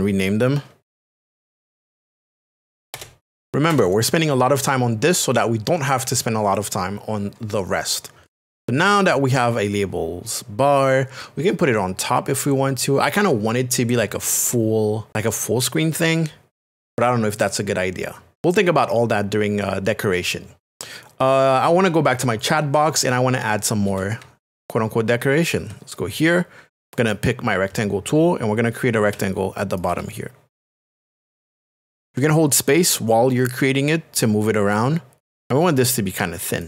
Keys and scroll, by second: 0.7-3.5 typing, 2.9 Return, 29.1 space, 32.1 space, 34.6 space.